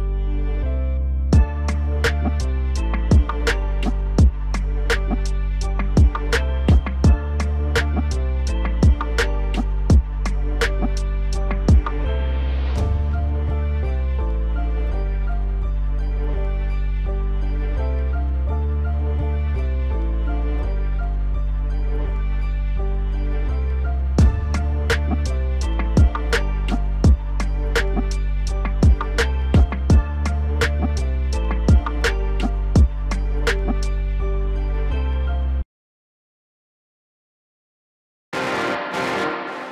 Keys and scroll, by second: 0.7 alt+w, 17.9 alt+w, 33.1 F4.